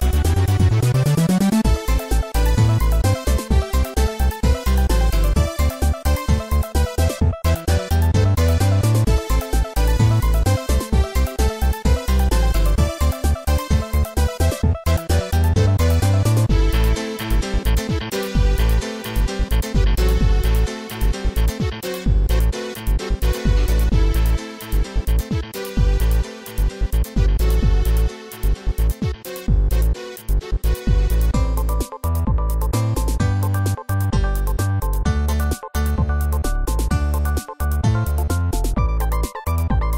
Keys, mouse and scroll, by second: 2.4 0, 3.4 ctrl+s, 3.6 click, 11.3 ctrl+s, 11.5 click, 12.7 0, 14.2-14.8 scroll up 2, 15.5 right click, 16.3-17.1 typing, 18.3-20.7 typing, 20.9 Tab, 22.6-24.4 typing, 26.5 right click, 27.4 right click, 28.5 right click, 29.2 scroll down 1, 29.6 ctrl+s, 29.8 click, 30.5-31.5 typing, 32.4 scroll up 2, 32.6 scroll down 1, 33.0 right click, 33.5 right click, 34.0 right click, 34.5 right click, 35.3 middle click, 36.0 scroll down 1, 37.0-39.9 typing.